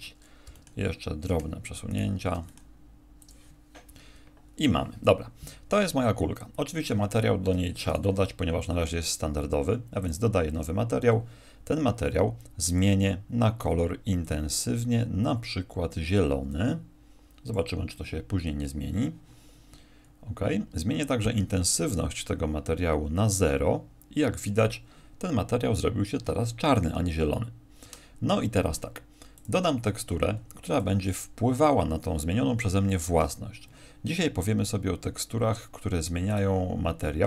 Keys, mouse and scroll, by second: 0.4 g, 1.9 right click, 2.3 g, 3.3 click, 7.5 Escape, 7.9 right click, 9.0 click, 12.7 click, 21.3 click.